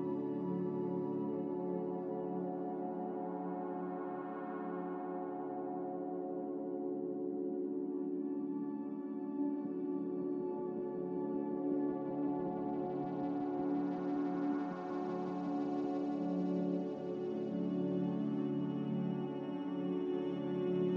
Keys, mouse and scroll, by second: 4.6-7.7 drag, 13.5 click, 14.3 z, 19.0 Escape, 19.2 Escape, 19.5 a.